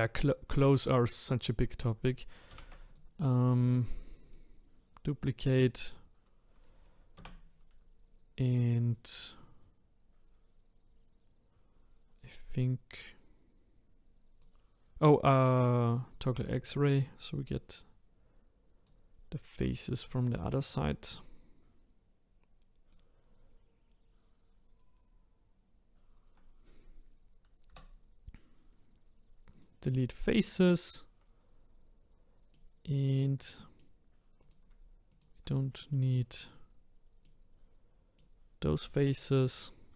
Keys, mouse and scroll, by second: 0.2 click, 1.2 click, 2.5 shift+d, 4.2 click, 5.8 click, 7.1 Tab, 8.9 click, 16.1 click, 20.0 click, 20.7 click, 24.8-26.0 scroll up 4, 27.7 Delete, 32.5-34.4 middle drag, 34.4 click, 35.1 shift+click, 35.9-39.4 middle drag, 39.4 click.